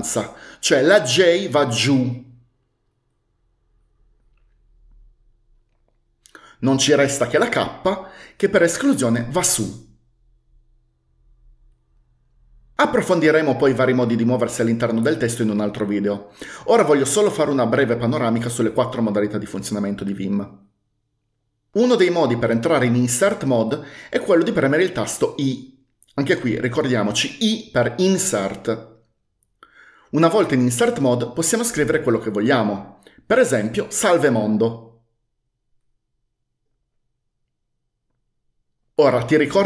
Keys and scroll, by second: 1.1-2.3 typing, 7.7-9.0 typing, 25.6 i, 33.6-36.3 typing.